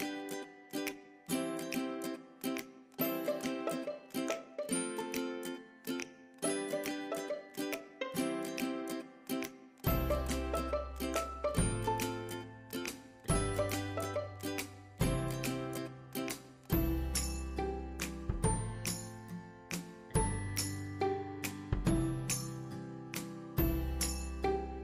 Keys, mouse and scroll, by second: 5.5 scroll up 1, 7.3-9.9 drag, 9.9-11.0 scroll up 1, 11.0 scroll down 1, 12.2-17.1 drag, 18.6 click, 18.7-24.8 drag.